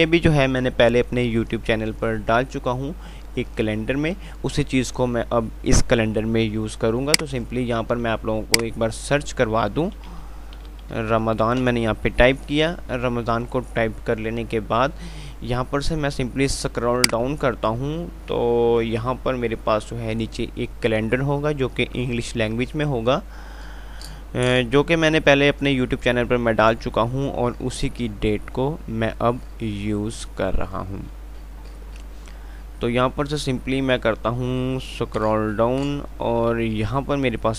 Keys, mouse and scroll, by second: 7.3-10.2 drag, 7.6 typing, 10.2 r, 11.9 Return, 15.3-16.9 scroll down 1, 18.9 typing, 27.0-27.7 typing.